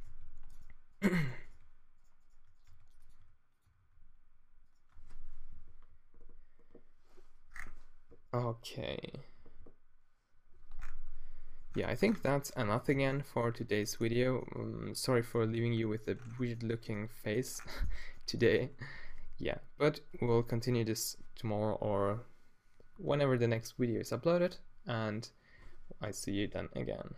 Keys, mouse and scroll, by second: 0.0 g, 0.6 right click, 1.5 g, 2.7 g, 3.2 r, 3.7 r, 4.9 Tab, 10.9 middle click, 12.1 Tab, 12.5 Tab, 12.8 z, 27.1 middle click.